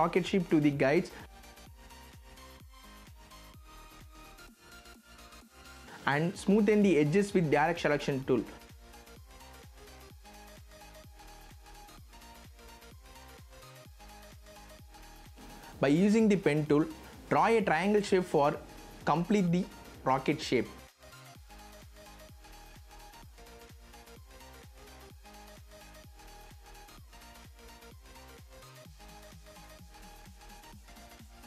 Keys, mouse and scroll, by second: 2.4 z, 2.8 click, 4.1 v, 5.2-12.0 drag, 12.0-12.3 scroll down 1, 13.5 v, 16.3 click, 22.3 shift+click, 27.2 shift+v, 27.8 click, 28.9-29.5 scroll down 1, 29.5 scroll up 1, 30.9-31.4 drag.